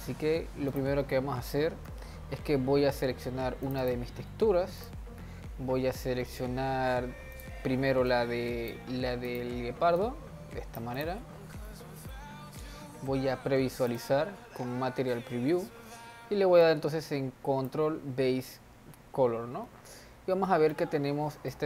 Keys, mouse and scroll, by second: 0.7 click, 9.4 click, 10.0 click, 11.0-11.7 drag, 11.7-13.0 middle drag, 13.0 z, 16.6 drag, 20.7-21.6 middle drag.